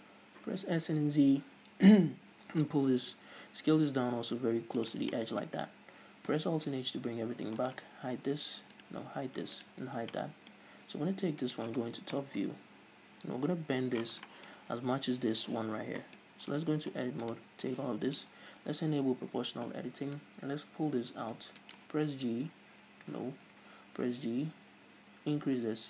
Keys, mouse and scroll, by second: 5.1 shift+click, 5.4-7.8 middle drag, 5.8-6.9 scroll down 2, 6.9 alt+h, 7.8 right click, 8.4 g, 9.0 right click, 9.3 h, 9.8 right click, 9.9 h, 10.3-11.6 middle drag, 11.6 right click, 12.3 KP_7, 14.5-17.4 shift+middle drag, 14.7-15.8 shift+scroll up 2, 15.8-16.2 shift+scroll up 1, 16.7 Tab, 17.4 right click, 17.8 click, 19.4 o, 20.4-21.9 drag, 21.9 right click, 22.3 h, 23.5 ctrl+z, 24.2 g.